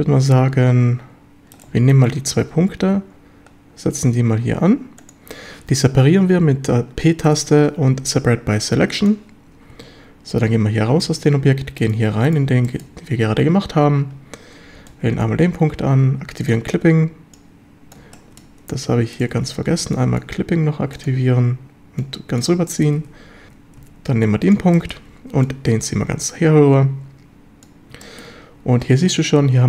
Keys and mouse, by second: 2.7 shift+d, 5.0 click, 7.3 p, 9.7 Tab, 11.1 a, 12.7 shift+middle drag, 13.7 Tab, 14.8 b, 16.4 click, 17.4 click, 18.2 shift+middle drag, 18.9 Tab, 19.2 click, 19.3 Tab, 19.8 b, 22.0 click, 22.7 shift+drag, 23.0 Tab, 23.5 Tab, 23.8 a, 24.2 b, 24.8 shift+drag, 25.5-27.6 drag, 28.0 shift+middle drag.